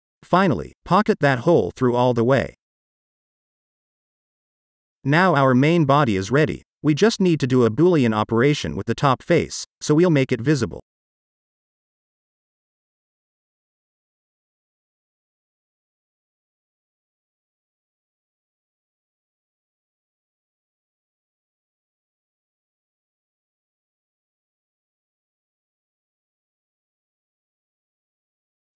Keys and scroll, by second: 6.5 ctrl+s, 10.0 space.